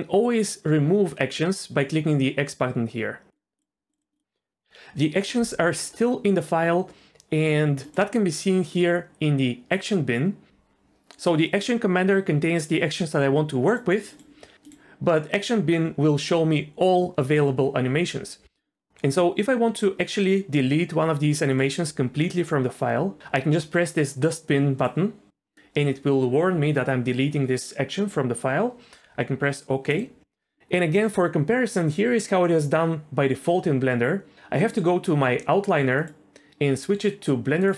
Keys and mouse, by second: 3.3-8.0 drag, 11.5 click, 14.1-19.8 drag, 24.9-30.0 drag, 36.0-37.7 drag.